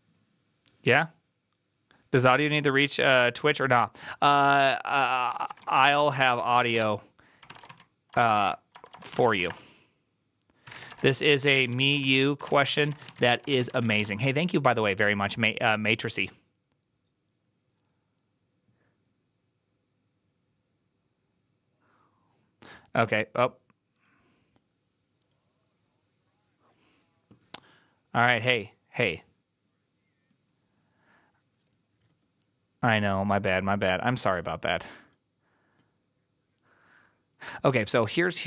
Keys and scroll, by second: 5.3-14.4 typing.